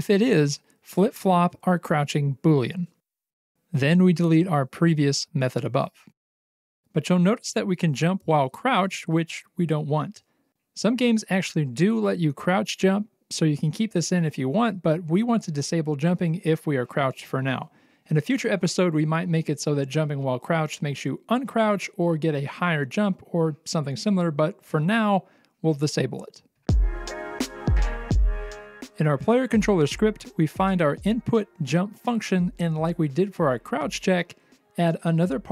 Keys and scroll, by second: 0.8 BackSpace, 5.8-7.6 typing, 8.8 c, 10.9 w, 12.8 w, 13.5 c, 14.1 w, 14.8 c, 16.5 Escape, 17.1 space, 18.5-23.4 typing, 24.8-26.6 typing, 34.1 ctrl+c.